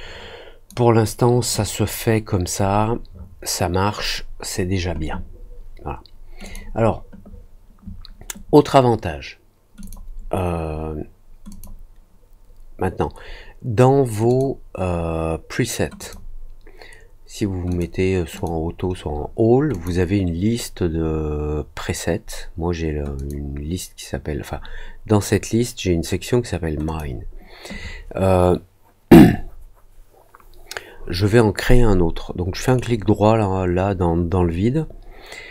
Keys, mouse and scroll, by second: 6.4 click, 9.7 click, 11.4 click, 14.2 click, 15.9 click, 17.6 click, 18.3 click, 19.7 click, 23.1 click, 26.8 click, 32.6 right click.